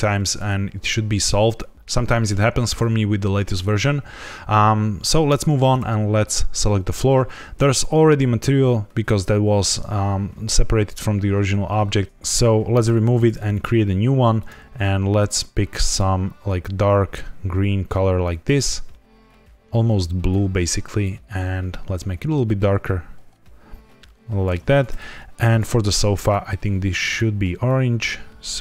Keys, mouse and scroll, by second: 6.2 click, 12.0 ctrl+z, 12.7 click, 13.5 click, 14.3 click, 25.4 click, 26.2 click, 27.0 click.